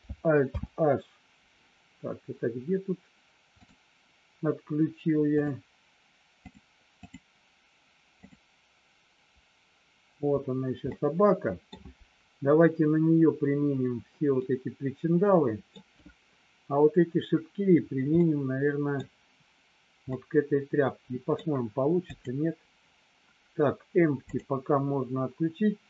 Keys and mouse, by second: 0.4 alt+h, 3.5 click, 7.0 click, 10.9 middle click, 14.3-15.6 middle drag, 18.0 middle click, 20.0-21.3 middle drag, 22.0 click.